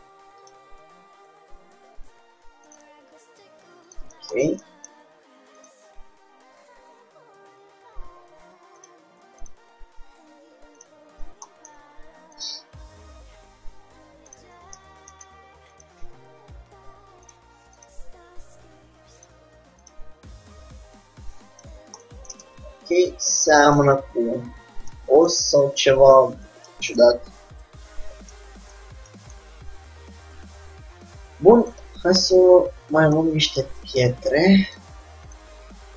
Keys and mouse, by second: 2.8-4.6 drag, 3.1 g, 4.6-5.9 middle drag, 5.9-7.6 drag, 5.9 g, 9.6-11.4 drag, 10.2 g, 11.7 middle click, 12.6-23.0 drag, 12.8 g, 24.3 click, 24.3 Tab, 25.9-28.8 middle drag, 32.0-33.4 drag, 33.4 middle click, 35.2-35.9 drag.